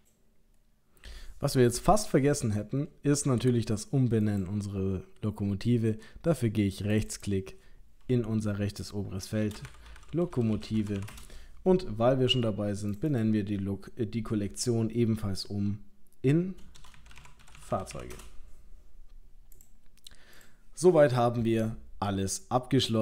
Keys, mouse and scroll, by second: 4.2 click, 6.9 click, 12.9 click, 13.1 click, 19.6 click, 20.4 click.